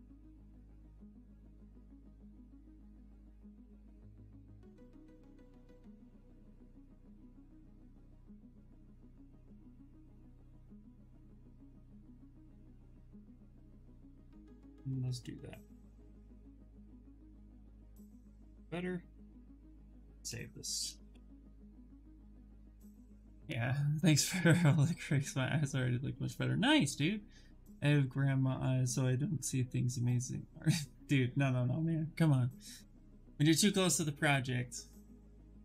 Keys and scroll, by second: 7.3 q, 8.3 shift+f, 11.3 shift+f, 13.7 2, 15.7 shift+f, 20.5 Return, 20.8 Return.